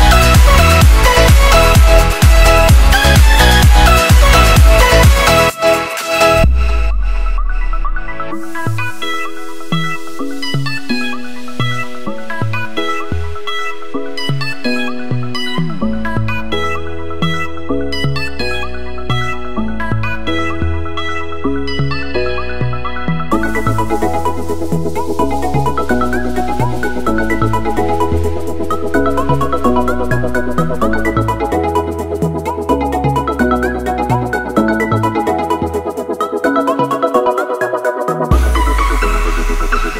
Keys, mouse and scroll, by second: 3.5 click, 25.2 click, 27.3 click, 35.6 F2, 36.5 right click, 37.8 click, 39.1 right click.